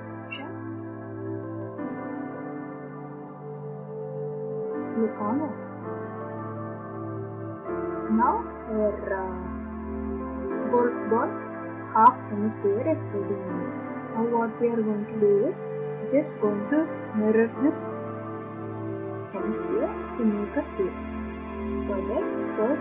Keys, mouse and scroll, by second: 0.0 click, 1.7-5.0 drag, 5.5-5.9 drag, 14.1 middle click, 18.9 middle click.